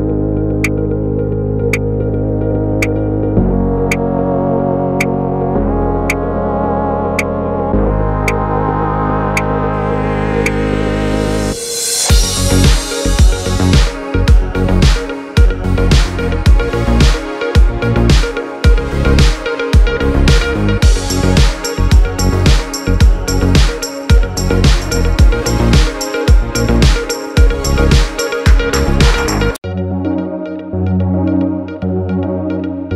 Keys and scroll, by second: 8.7 typing, 17.4 space, 18.2 space.